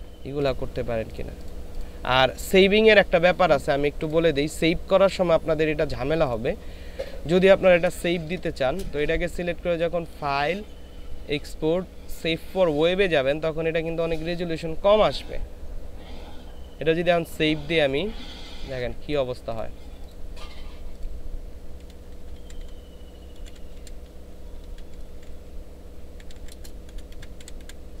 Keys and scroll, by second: 8.1 ctrl+space, 21.9-24.9 typing, 26.2-27.5 typing.